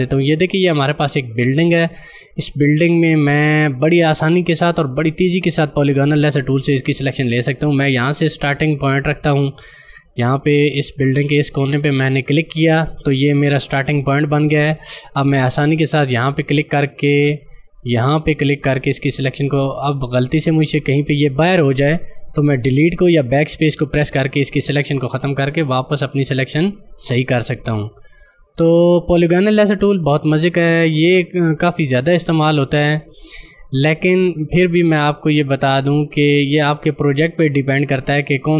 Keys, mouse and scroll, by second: 4.7 scroll up 1, 5.1-6.6 scroll down 1, 12.2 click, 16.1 click, 26.7 click, 29.8 space, 29.9 click, 30.3 space, 31.8 click, 37.0 space, 37.3 click, 37.5 space, 38.3 click.